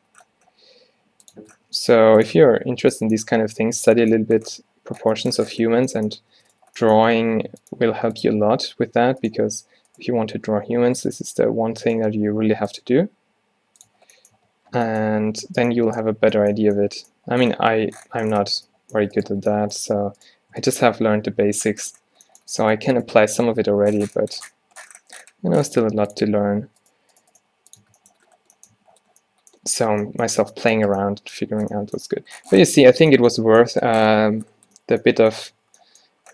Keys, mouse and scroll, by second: 1.5 Tab, 1.8 Tab, 2.0 g, 2.4 Tab, 2.8 a, 5.8 Tab, 6.4 Tab, 7.1 Tab, 7.4 r, 7.8 g, 8.4 Tab, 9.0 Tab, 9.2 Tab, 9.4 Tab, 10.4 s, 14.0 Tab, 14.5 Tab, 15.2 a, 16.3 a, 16.7 a, 18.6 Tab, 19.1 Tab, 19.4 Tab, 23.6 g, 24.9-26.6 drag, 26.6 Tab, 26.8 Tab, 27.0 g, 27.5 g, 27.9 Tab, 28.9 a, 30.5 a, 30.9 a, 35.3 a, 35.7 a.